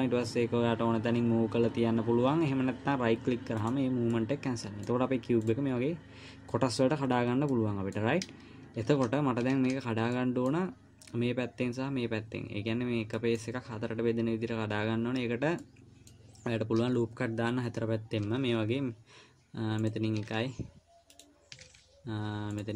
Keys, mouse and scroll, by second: 4.5 middle click, 5.9 click, 7.5-7.8 scroll up 2, 7.9 middle click, 9.3 ctrl+z, 9.9 ctrl+z, 10.5 middle click, 15.9 middle click, 18.7 ctrl+r, 22.0 ctrl+r.